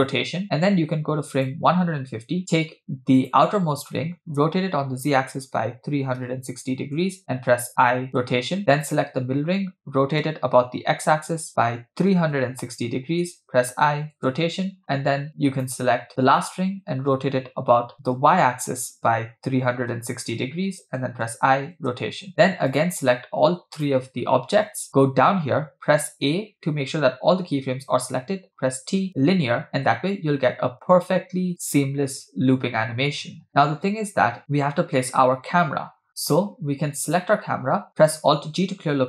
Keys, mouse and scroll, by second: 0.2 i, 1.4-2.4 drag, 3.2 click, 4.4 r, 7.7 i, 8.7 click, 10.2 r, 14.2 i, 15.5-17.2 drag, 17.2 r, 21.3 i, 22.7-23.4 shift+drag, 23.8 shift+click, 26.1 a, 29.0 t, 29.7 space, 34.4 space, 34.9-35.7 scroll down 2, 35.7-36.8 scroll down 3, 37.1 click, 38.3 alt+g, 38.9-39.0 scroll up 3.